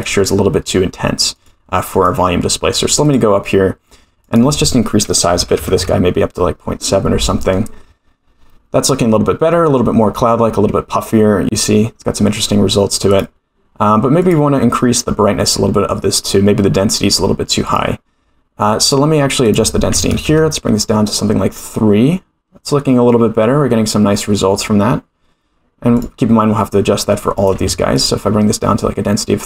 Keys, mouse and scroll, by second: 0.0 click, 1.3 click, 1.9 click, 3.0 click, 4.2-7.6 drag, 10.4-13.0 scroll up 2, 13.0 click, 14.2 click, 17.6 click, 18.7 click, 19.4-21.5 drag, 25.9 click, 27.3-28.7 drag.